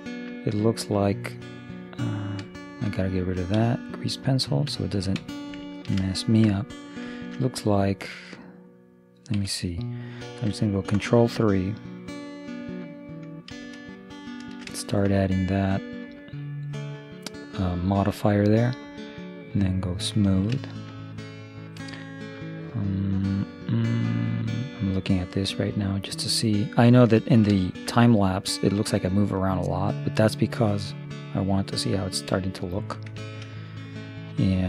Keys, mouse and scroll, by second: 2.7-4.4 middle drag, 3.6 d, 3.8 click, 4.4-5.6 right drag, 5.8-7.9 middle drag, 9.1-10.7 right drag, 9.5 Escape, 13.6 ctrl+3, 14.2 middle click, 17.7-19.6 middle drag, 19.8-21.6 drag, 20.3-22.5 middle drag, 24.0 middle click, 26.0 middle click, 29.4 middle click, 32.5-34.6 middle drag.